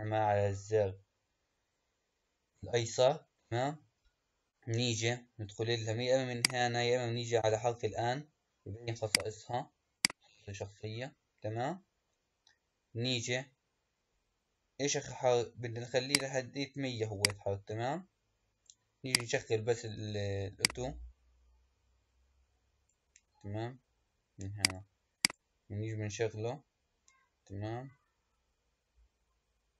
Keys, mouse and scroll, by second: 6.3 click, 7.3 n, 8.9 click, 9.9 click, 16.2-19.1 drag, 20.5-23.5 drag, 24.5 click, 25.1 click.